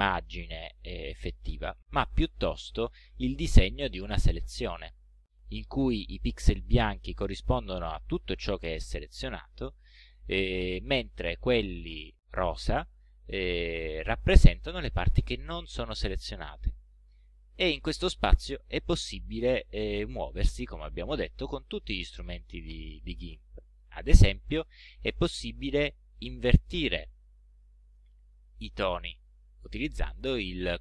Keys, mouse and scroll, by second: 2.1 ctrl+scroll up 1, 3.6-3.9 ctrl+scroll up 1, 4.7 ctrl+scroll down 1, 5.3 ctrl+scroll up 1, 6.1 ctrl+middle click, 17.0-17.3 ctrl+scroll down 1, 17.5 ctrl+scroll down 1, 18.5 ctrl+scroll up 2, 19.5 ctrl+scroll down 2, 24.5 right click.